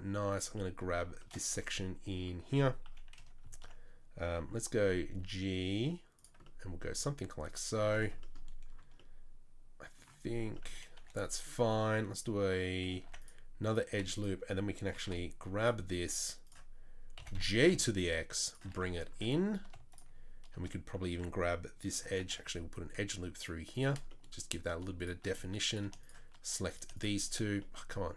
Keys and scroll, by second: 2.8 KP_3, 3.2 KP_1, 4.8 g, 7.0 e, 11.0 2, 13.0 ctrl+r, 13.9 3, 15.0 2, 17.2 g, 18.7 Tab, 19.2 Tab, 22.2 ctrl+r.